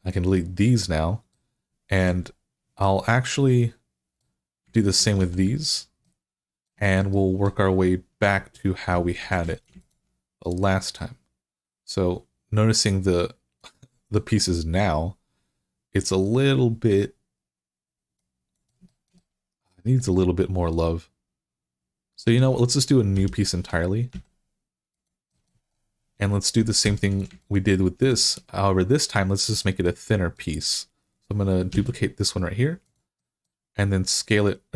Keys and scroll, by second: 5.0 x, 9.0 2, 23.0 i, 26.7 3, 31.5 d.